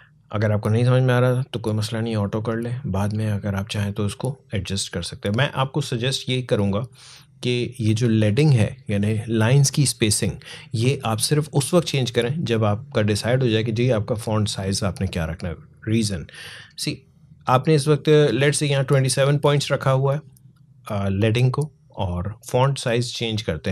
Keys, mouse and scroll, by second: 3.1-9.5 drag, 22.3 click.